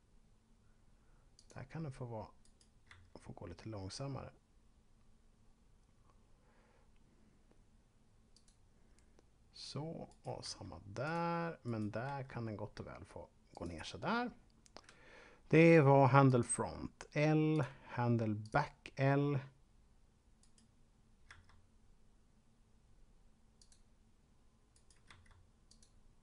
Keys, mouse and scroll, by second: 1.4 click, 2.4 right click, 2.9 g, 8.2 click, 10.1 right click, 10.4 g, 10.9 click, 11.6 right click, 11.9 g, 13.4 click, 16.2 click, 20.4 right click, 21.2 g, 23.6 click, 24.7 right click, 25.1 g, 25.7 click.